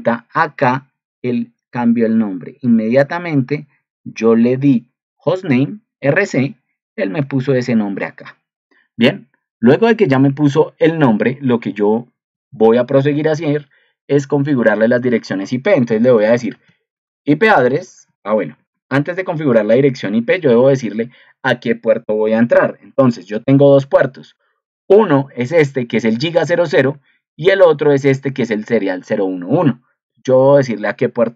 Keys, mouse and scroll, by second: 20.4 ctrl+2.